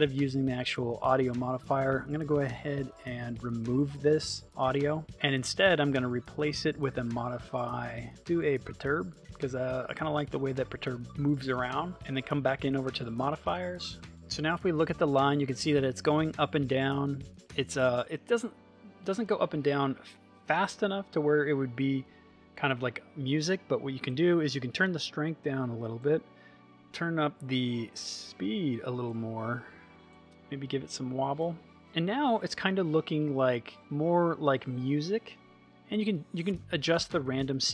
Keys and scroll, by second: 14.4 space.